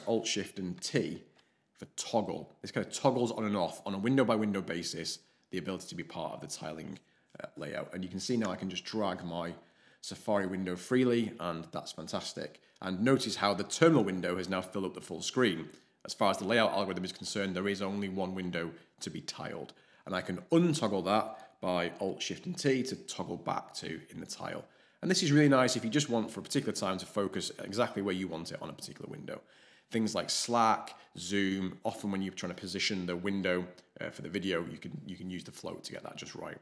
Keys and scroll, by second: 0.7 alt+shift+t, 22.2 alt+shift+t.